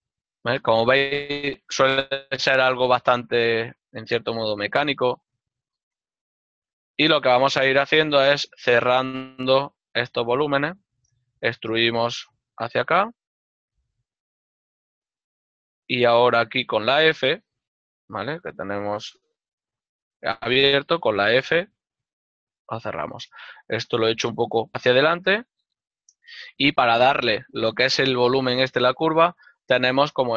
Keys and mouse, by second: 0.4 click, 2.1 middle click, 3.4 right click, 6.4 y, 7.6 shift+middle click, 7.8 right click, 7.8 f, 10.3 click, 11.3 e, 13.3 ctrl+click, 14.1 middle click, 16.8 middle click, 19.3 z, 20.2 click, 22.4 f, 22.9 shift+middle click, 24.7 click, 25.1 y, 26.2 click.